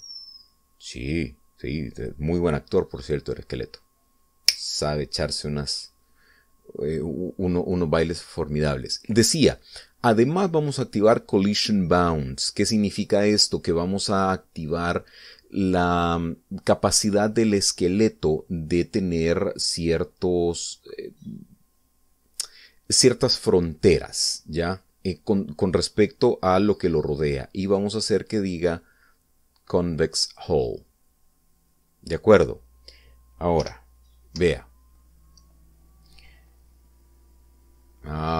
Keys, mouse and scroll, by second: 0.4 click, 3.0 click, 28.7 click, 31.4 click, 32.4-33.1 scroll down 2, 33.2-33.5 scroll up 1, 34.7 p, 35.5 Up.